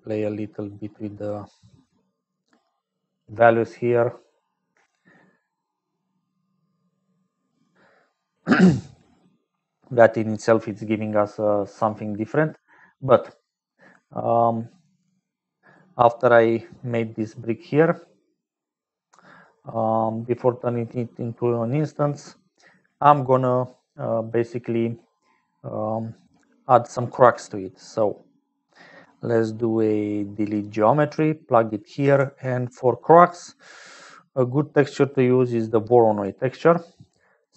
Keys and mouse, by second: 0.0-37.5 typing, 5.7-7.8 shift+drag, 8.1 middle click, 9.8 middle click, 15.7 middle click, 16.8 middle click, 18.3 middle click, 19.8-21.3 drag, 22.2 middle click, 23.2 middle click, 31.7 click, 36.4-37.5 drag.